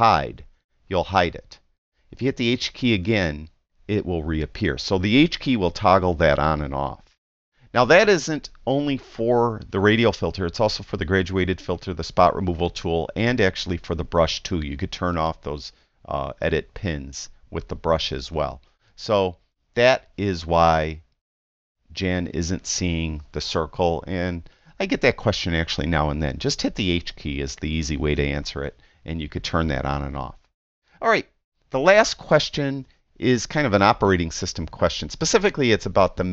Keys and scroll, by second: 0.4 h, 3.0 h.